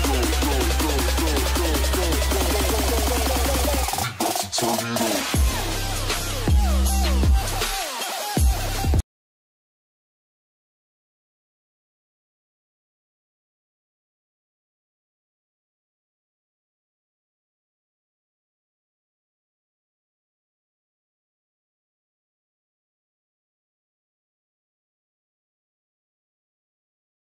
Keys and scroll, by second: 4.3 ctrl+shift+space, 7.0 space.